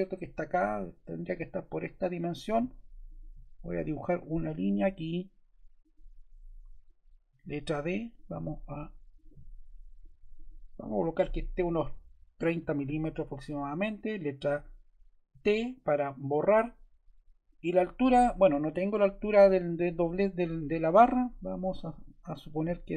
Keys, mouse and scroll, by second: 6.4 ↺, 7.2 d, 8.1 click, 10.3 click, 12.0-15.2 typing, 22.3 click.